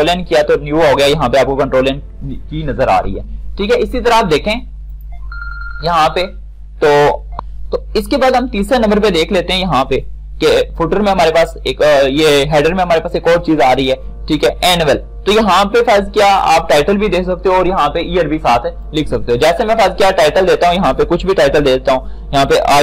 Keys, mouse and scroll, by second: 4.9 click, 7.8 F9, 10.7 click, 19.1 click.